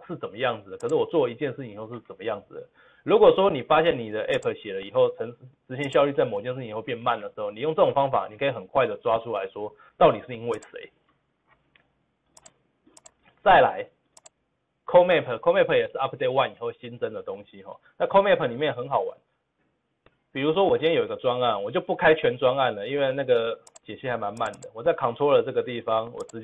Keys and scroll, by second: 19.5 ctrl+v, 19.5 ctrl+z.